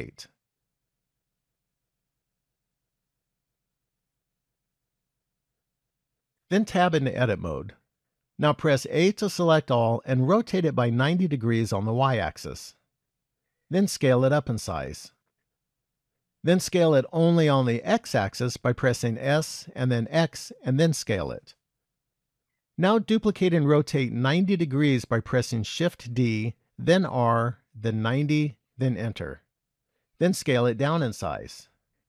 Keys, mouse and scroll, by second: 3.4 click, 4.6-5.8 scroll down 2, 5.8 KP_1, 7.0 Tab, 9.0 a, 10.3 r, 13.4 s, 19.3 s, 24.9 shift+d, 30.4 s.